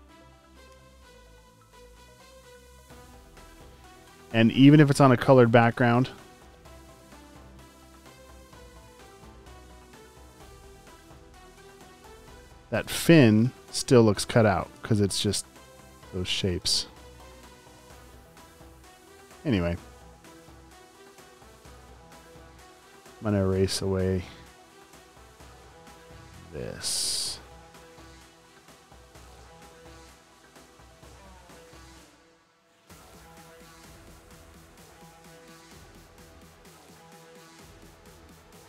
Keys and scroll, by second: 0.0-1.2 typing, 2.8 v, 3.4 space, 3.9 alt+super+space, 5.4-7.7 typing, 7.4 super+space, 9.1 typing, 11.3 space, 12.7 space, 12.9 space, 13.7 space, 14.0 a, 16.0 super+z, 16.5 v, 17.1 space, 17.7 a, 20.3-23.7 typing.